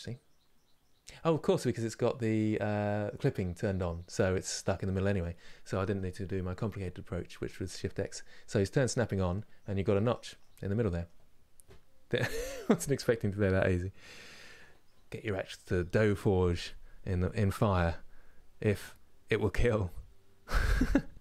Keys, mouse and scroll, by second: 5.8 scroll down 2, 6.3-9.1 middle drag, 9.1-9.6 scroll down 2, 9.6-21.2 middle drag.